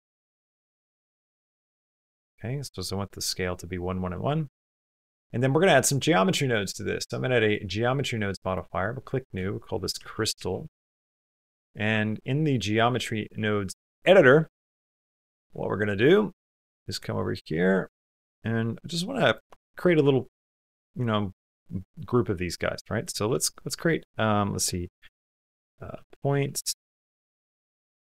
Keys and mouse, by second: 4.4 shift+middle click, 5.6 click, 6.3-7.3 drag, 8.3 click, 9.0-10.5 shift+drag, 12.7-13.8 drag, 15.1 shift+click, 16.4 shift+click, 17.3 click, 17.9 click, 18.3 click, 19.0 click, 23.0 shift+a.